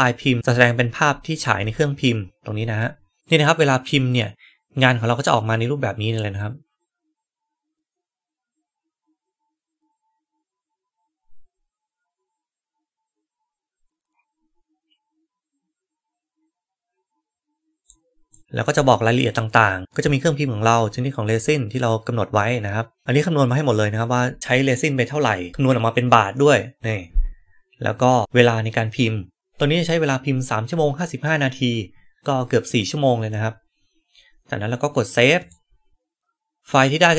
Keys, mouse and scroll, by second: 5.4-17.7 drag, 17.7 right click, 18.2 right click, 35.3 click.